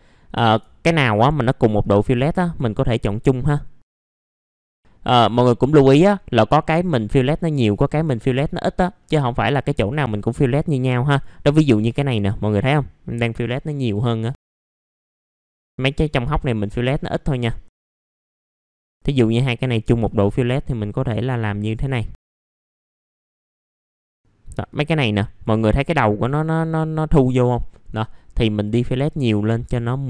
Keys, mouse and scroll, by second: 0.0 scroll up 1, 0.3 click, 0.8 ctrl+click, 1.8 click, 2.8 scroll down 1, 3.1 middle click, 3.5-3.9 scroll up 1, 3.9 click, 4.0 middle click, 4.2 ctrl+click, 4.4 click, 4.7 scroll down 1, 5.2 middle click, 6.5-7.4 scroll up 1, 7.4 click, 8.2 scroll down 1, 8.5 middle click, 9.3 scroll up 1, 10.1-11.6 drag, 13.1 scroll down 1, 13.4 middle click, 13.7-14.6 scroll up 2, 14.6 click, 15.3 middle click, 15.4 scroll up 1, 15.6 click, 15.8 click, 16.4 middle click, 17.7 click, 18.1 scroll down 1, 18.2 middle click, 18.7 click, 20.2-20.6 scroll down 1, 20.6 middle click, 21.0 scroll up 1, 21.4 middle click, 21.9 click, 22.8 scroll down 1, 22.9 middle click, 22.9 scroll up 1, 23.2 click, 23.6-24.0 scroll down 2, 23.7 middle click, 24.0-24.6 scroll up 1, 24.6-25.9 drag, 27.5 middle click, 28.0-28.4 scroll up 1, 28.4 click, 28.9-29.7 scroll up 1, 29.7 click.